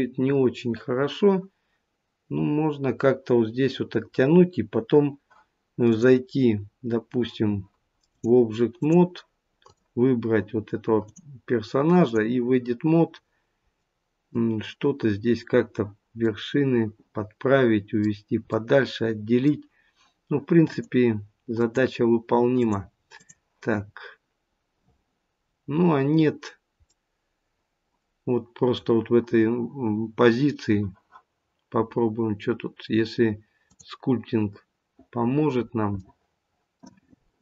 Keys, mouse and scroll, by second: 5.8 click, 8.0 click, 10.9 click, 12.8 scroll up 3, 13.7 middle click, 20.7 middle click, 20.7 click, 22.6 click, 23.7 scroll down 1, 25.4 scroll down 2, 26.9 middle click.